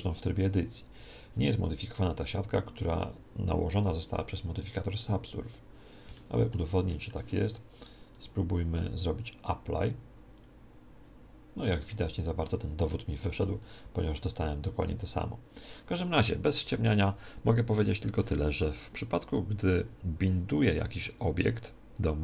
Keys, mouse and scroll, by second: 0.4-2.4 middle drag, 5.0 Tab, 5.5-8.6 middle drag, 8.1 click, 12.7-14.6 middle drag, 13.6 right click, 19.6 click, 21.4 right click.